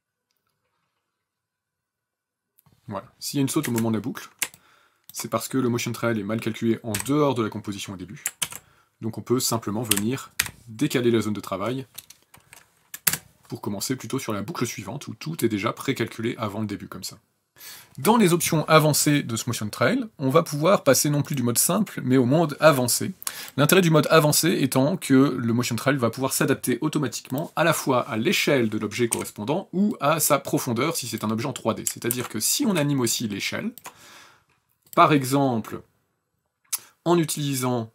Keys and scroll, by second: 3.4 space, 6.6 b, 8.1 ctrl+z, 9.6 Page_Down, 10.1 b, 12.8 KP_0, 17.5 ctrl+s, 28.9 s, 31.8 ctrl+z.